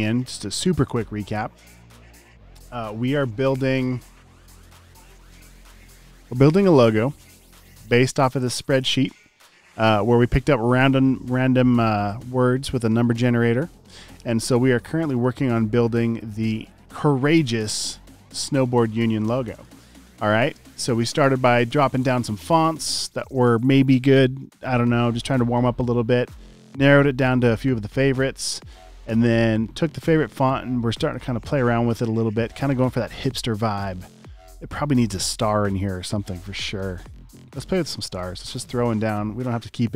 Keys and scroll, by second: 17.4 space, 17.9 alt+super+space, 18.8-20.3 typing, 21.9 space, 23.0 space, 23.6 space, 24.4 space, 24.9 alt+super+space, 25.7 space, 25.8 space, 26.2 space, 27.4 space, 28.1 space, 28.6 space, 28.9 space, 30.8 space, 32.2 space, 38.5 m.